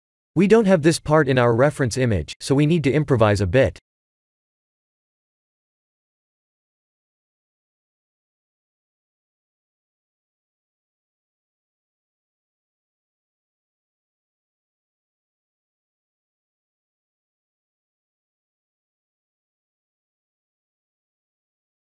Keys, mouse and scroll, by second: 0.0 KP_3, 0.5 click, 0.8 shift+a, 5.7 g, 8.1 s, 12.5 s, 17.6 s, 17.6 g, 20.6 s.